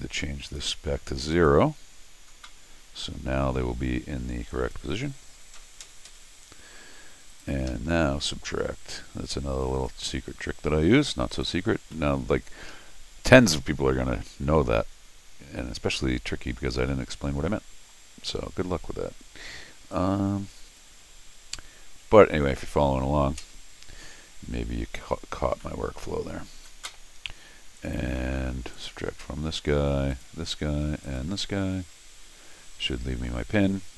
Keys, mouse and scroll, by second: 0.4 click, 1.3 click, 4.5 click, 7.3 click, 7.7 Escape, 9.7 click, 11.3 click, 11.9-13.3 middle drag, 13.7 scroll down 1, 14.1 scroll up 1, 16.9 middle click, 17.3 middle click, 18.3 middle click, 19.9 click, 24.5 middle click, 24.5 scroll down 2, 25.1 middle click, 25.1 scroll down 2, 25.6 middle click, 26.4 scroll up 1, 27.8 click, 28.7 click, 29.3 scroll up 2, 30.1 click, 31.0 click.